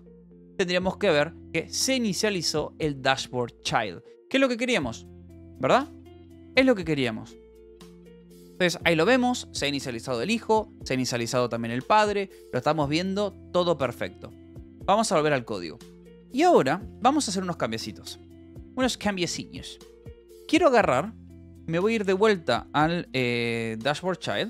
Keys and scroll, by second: 17.3 space, 17.4 e, 19.0 ctrl+h, 19.1-24.4 typing, 24.3 Return.